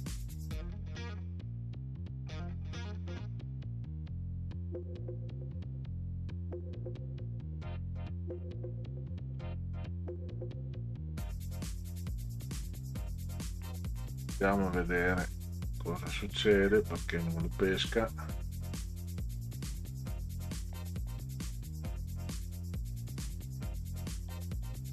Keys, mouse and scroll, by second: 1.6 middle click, 2.4-2.9 ctrl+scroll down 2, 3.5 middle click, 5.6 middle click, 6.5 middle click, 7.6 middle click, 8.5-8.9 ctrl+scroll up 4, 9.6 click, 11.7 click, 13.2 click, 13.7 right click, 15.4 click, 16.7 scroll down 2, 17.5 click, 17.9 click, 18.2 click, 18.5 click, 18.7 click, 19.1 click, 19.5 click, 19.9 click, 20.7-21.3 drag, 22.0 click, 22.2 click.